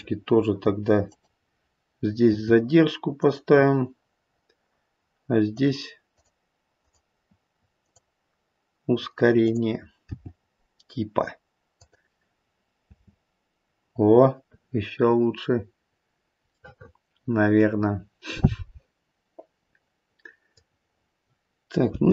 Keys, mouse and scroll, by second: 1.0 click, 2.3 g, 5.4 click, 6.1 click, 6.8 click, 7.7 click, 9.4 click, 10.0 g, 12.9 space, 14.7-15.2 scroll up 2, 15.8-16.6 scroll down 2, 16.6 middle click, 16.9 middle click, 18.1 middle click, 21.9 space.